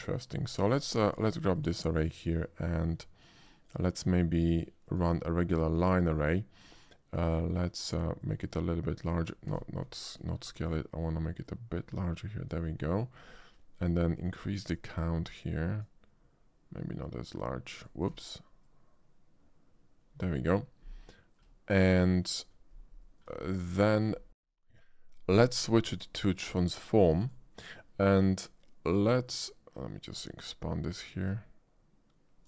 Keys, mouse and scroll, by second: 0.3 shift+click, 0.7 shift+middle click, 1.6 shift+click, 4.9 click, 8.2-9.1 drag, 9.5 ctrl+z, 9.9-10.4 middle drag, 11.4-12.5 shift+drag, 13.0 shift+middle drag, 13.3 middle drag, 14.8-15.8 drag, 17.0-17.9 drag, 18.1 ctrl+z, 18.6-20.3 drag, 21.1 middle drag, 21.8 shift+middle click, 22.2-22.5 shift+middle drag, 23.0 shift+middle drag, 23.7 shift+middle drag, 24.3 r, 24.4 right click, 25.9 click, 27.2 click, 29.3-30.0 shift+drag, 31.3-32.4 drag.